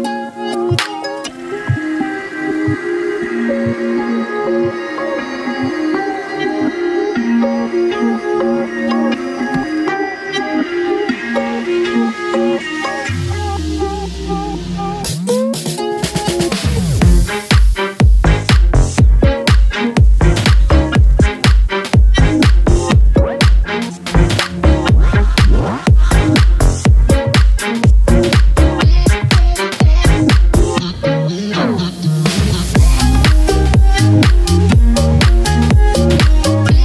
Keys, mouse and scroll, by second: 1.4-14.1 drag, 14.6 scroll down 1, 17.7 scroll up 1, 18.3 scroll down 1, 18.8 click, 19.3 scroll up 1, 22.4 click, 30.7 ctrl+z, 31.5 click, 32.6 ctrl+z, 34.3 click.